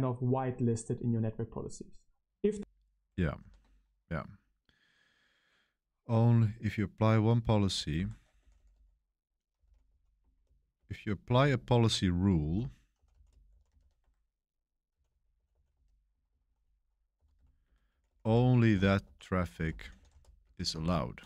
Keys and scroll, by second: 2.3 space, 3.3 super+7, 7.8-21.2 typing.